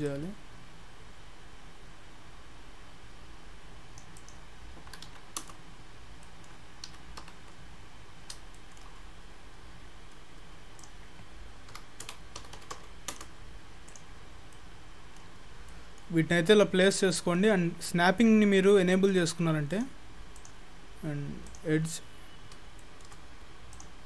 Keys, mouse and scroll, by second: 0.1 click, 4.2 click, 6.0 scroll down 6, 6.3 middle click, 7.3 KP_3, 8.1 scroll down 1, 8.2-8.9 scroll up 9, 8.6 shift+middle click, 8.9 shift+scroll down 1, 9.0-9.9 scroll up 9, 10.3-10.8 scroll up 3, 10.8 click, 11.8 g, 13.9 click, 14.2-15.1 scroll down 6, 14.6 middle click, 15.5-17.3 scroll down 15, 15.7 middle click, 17.2 middle click, 19.7 click, 20.4 click, 22.7-23.1 shift+scroll up 2, 22.8 shift+middle click, 23.8 click.